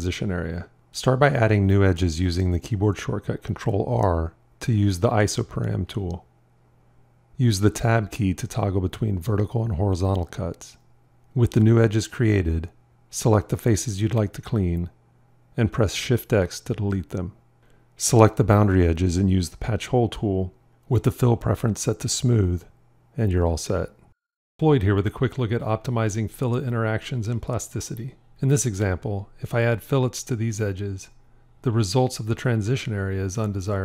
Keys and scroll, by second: 2.1 ctrl+r, 7.6 Tab, 16.4 shift+x.